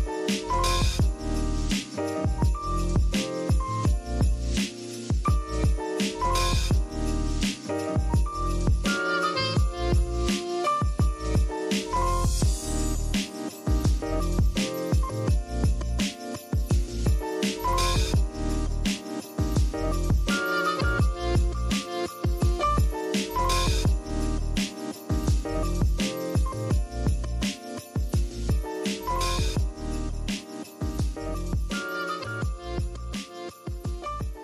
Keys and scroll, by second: 4.5 z, 4.9 v, 8.6 v, 9.7 i, 10.4 v, 12.6 super+x, 13.1 super+v, 14.0-15.5 typing, 17.0 v, 21.6-23.3 typing, 28.0 y.